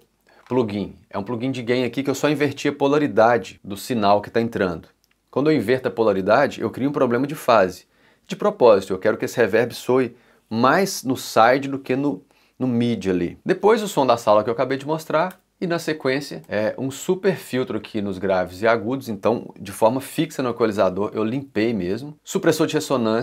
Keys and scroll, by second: 0.0 |, 13.3-15.8 typing, 21.3 3, 21.8 4.